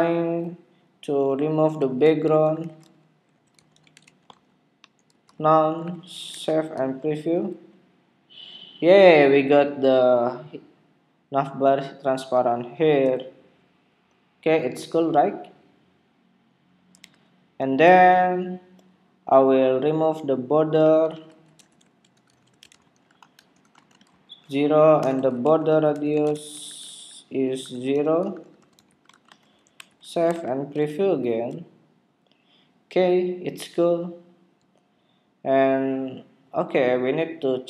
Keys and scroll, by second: 6.4 super+Tab, 6.8 super+r, 17.6 super+Tab, 30.4 super+Tab, 30.7 super+r.